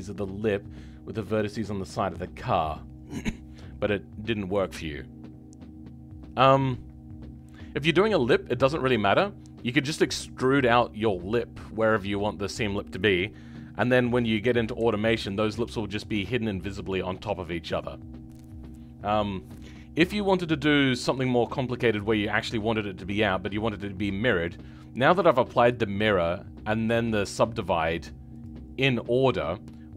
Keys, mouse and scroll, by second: 9.5-11.5 scroll down 2, 14.7 a, 20.2-24.0 scroll down 1, 24.0-24.9 scroll down 9, 29.5 scroll down 2.